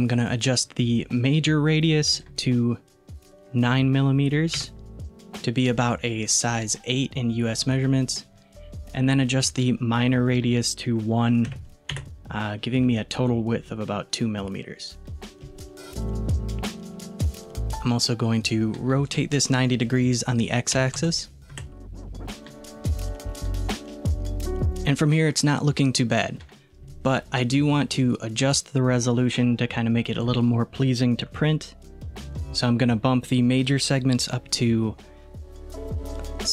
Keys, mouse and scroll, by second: 2.1-5.1 drag, 10.3-13.4 drag, 13.4-14.2 scroll down 1, 14.2-15.5 scroll down 1, 17.5-19.1 scroll down 1, 19.1-22.1 drag, 23.3-25.9 middle drag, 30.2-32.3 drag.